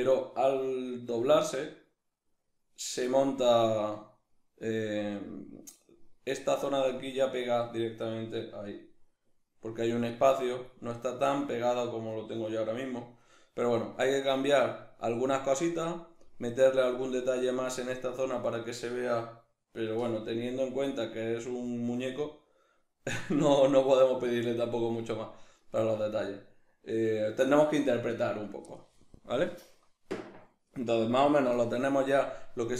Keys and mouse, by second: 3.7-5.2 middle drag, 8.8-10.5 middle drag, 10.8-14.1 middle drag, 14.1 right click, 14.6-32.7 middle drag.